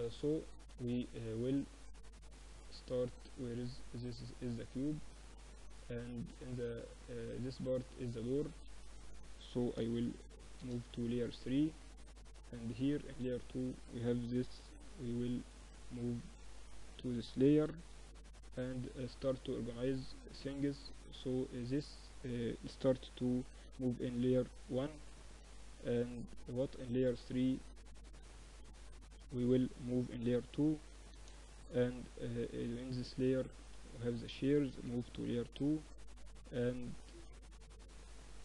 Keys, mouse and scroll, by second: 2.3 click, 3.2-5.3 middle drag, 5.3-7.3 drag, 6.1-7.3 right drag, 7.3 middle click, 7.7 a, 7.8-9.5 drag, 7.8 a, 8.9 m, 11.6 click, 12.5-14.1 middle drag, 14.1 click, 14.3 m, 15.9 Escape, 16.6 shift+c, 17.7-18.9 drag, 18.9 middle click, 19.3-22.5 middle drag, 22.5 m, 25.5-27.5 drag, 26.3 a, 27.5-29.1 middle drag, 29.1 m, 31.8-33.7 drag, 32.7 a, 33.1 a, 33.4 a, 34.1 m, 36.9-38.4 drag, 38.3 KP_7.